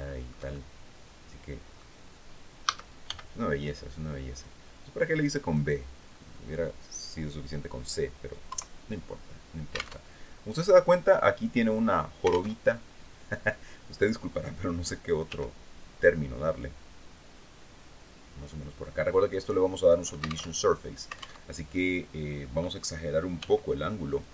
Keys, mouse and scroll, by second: 0.0-1.4 shift+middle drag, 2.1 a, 2.6 b, 3.9-5.2 drag, 8.0 KP_3, 9.5 alt+Tab, 12.0 alt+Tab, 14.8 g, 18.8 click, 20.0 alt+Tab, 20.9 alt+Tab, 22.9 g, 23.7 click, 24.2 Tab.